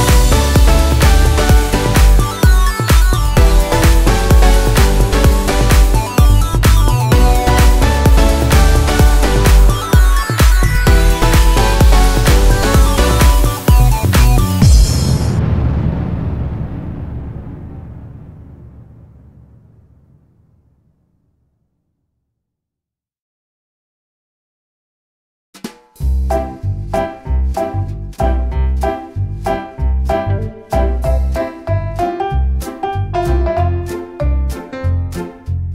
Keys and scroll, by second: 0.0-0.7 typing, 4.6 Escape, 5.6 e, 5.7 space, 8.3 e, 8.3 space, 11.1 e, 11.2 space, 31.2 space, 32.0 Escape.